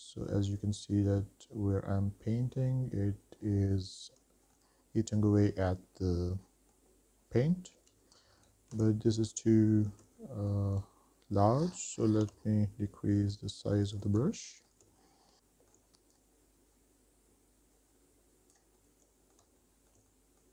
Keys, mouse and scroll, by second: 0.5-1.5 middle drag, 1.4-2.5 scroll down 3, 2.5-5.2 middle drag, 6.2 middle click, 8.0-8.7 scroll down 4, 8.9 ctrl+z, 9.4 middle click, 9.9 shift+middle click, 10.7 middle click, 12.4 f, 14.7 shift+middle click, 15.3 scroll up 3, 15.9 scroll down 2, 16.0 shift+middle click, 17.1-18.3 drag, 18.7-20.5 drag.